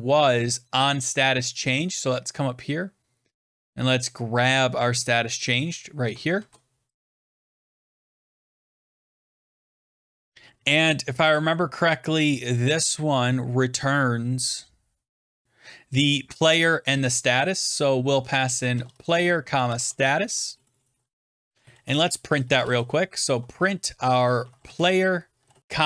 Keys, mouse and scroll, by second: 1.5-1.9 scroll down 6, 2.5 scroll up 1, 5.3 click, 5.5 click, 6.3 ctrl+c, 6.8-7.4 scroll, 6.9 click, 6.9 click, 7.0 ctrl+c, 7.9 click, 8.3 click, 8.4-9.8 typing, 10.0 Return, 11.2 click, 12.2-12.9 typing, 12.5-13.2 scroll down 7, 13.7 scroll down 3, 16.3 click, 16.9 click, 17.9-25.8 typing, 21.7 Return.